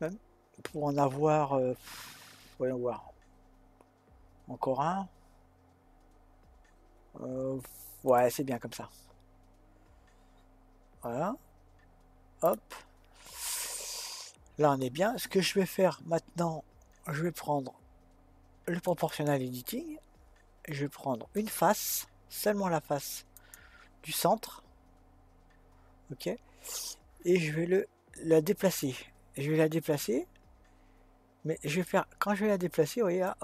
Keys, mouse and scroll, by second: 18.9 click, 21.4 click, 23.4 click, 28.7-29.9 drag, 29.9-33.1 middle drag, 33.2 click.